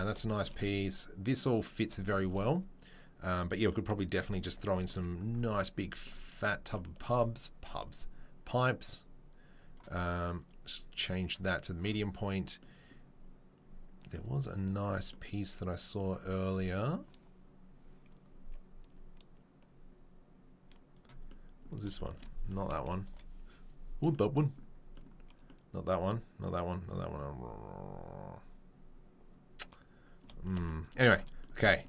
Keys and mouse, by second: 5.7 click, 5.7 middle click, 9.3-18.8 drag, 9.3-18.8 middle drag, 21.2-21.8 right drag, 23.1 Delete, 28.3-30.2 right drag, 31.6 shift+middle drag.